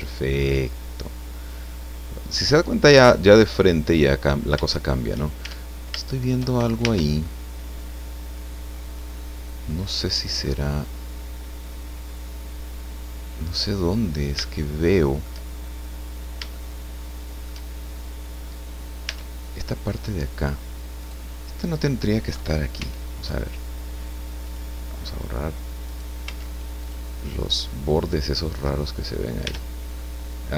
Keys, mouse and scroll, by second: 2.4-4.2 middle drag, 4.3 scroll up 1, 4.6 shift+middle click, 5.4 shift+Tab, 6.1 shift+middle click, 6.8 shift+Tab, 7.2 click, 7.5-14.6 middle drag, 15.6-16.3 shift+scroll up 3, 16.5-17.7 shift+middle drag, 17.7-18.1 shift+scroll up 3, 19.1 Tab, 21.0 right click, 22.7 x, 24.4 click, 25.8 right click, 26.2 x, 26.8 click, 27.6 click, 29.1 scroll down 2, 29.5 Tab, 30.0 click.